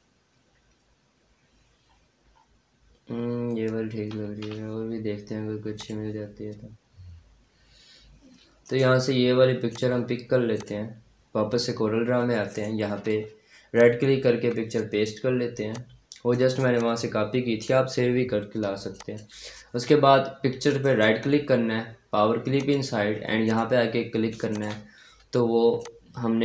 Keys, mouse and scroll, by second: 0.8-1.7 scroll down 1, 5.6 click, 8.5 right click, 9.6 click, 11.8-12.4 scroll down 1, 12.4 right click, 13.6 click, 14.2 F4, 15.6-17.9 drag, 17.9-18.8 scroll up 1, 18.8 click, 20.7 right click, 22.4 click, 26.0-26.4 shift+drag.